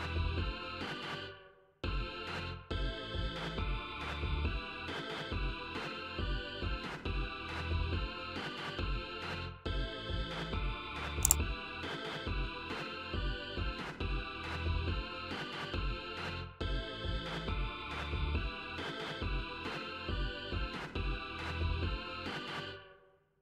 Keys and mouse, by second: 0.6 click, 1.5-2.7 drag, 6.0 click, 7.4 click, 8.4 click, 15.0 click, 16.1 click, 16.7-18.1 drag.